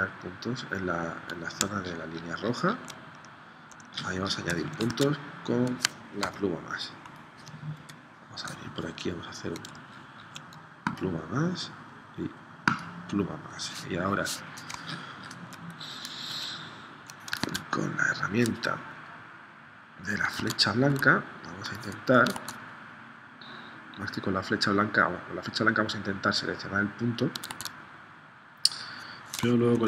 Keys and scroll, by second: 4.9 super+Tab, 6.3 v, 7.9 p, 17.4 super+Tab, 20.3 super+Tab, 20.8 a, 22.3 super+Tab, 27.5 super+Tab, 29.7 shift+c.